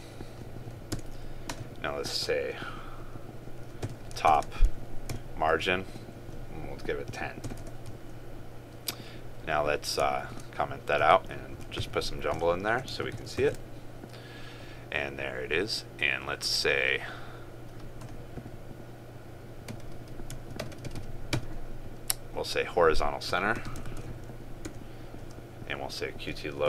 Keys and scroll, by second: 4.4 ctrl+space, 10.3 ctrl+/, 13.0 ctrl+s, 13.6 ctrl+r, 24.0 ctrl+space.